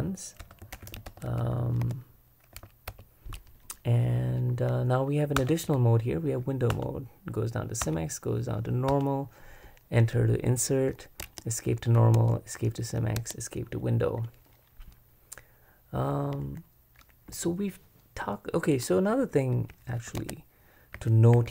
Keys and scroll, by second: 0.0-1.4 typing, 1.8 Escape, 2.6-3.4 typing, 5.4 super+Return, 6.7 Return, 7.8 Return, 8.9 Return, 11.2 Escape, 12.2 Escape, 13.2 Escape, 20.2 super+Escape, 20.7-21.5 typing.